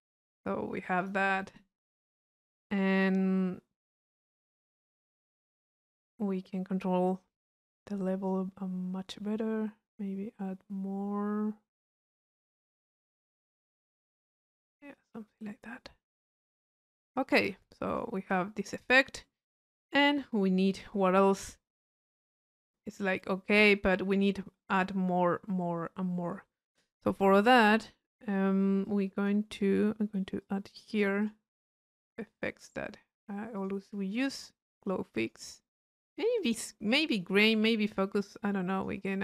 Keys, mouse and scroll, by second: 0.5 click, 8.3 click, 9.3-17.2 middle drag, 17.2-19.2 drag, 27.6-28.9 middle drag, 28.9-32.2 drag, 29.6-31.2 right drag, 32.4 click, 33.6 click, 34.7-35.7 drag, 36.5-37.6 drag, 38.0-39.2 drag.